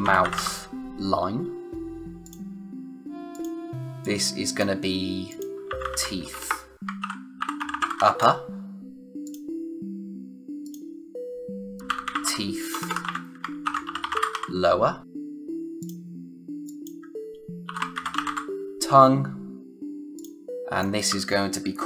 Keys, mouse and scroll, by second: 0.0-0.8 typing, 2.2 click, 4.1 click, 5.4-8.4 typing, 9.2 click, 11.5-14.8 typing, 15.0 click, 17.4-18.7 typing, 19.6 click.